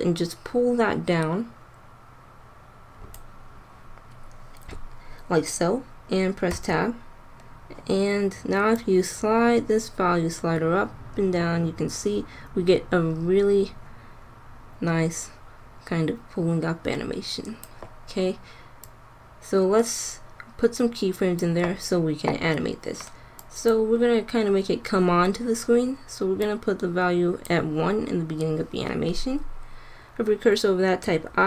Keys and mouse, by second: 6.5 Tab, 8.6-10.6 drag, 18.7-20.7 drag, 23.3 click, 25.2-26.2 middle drag, 26.2-28.3 drag, 31.0 i.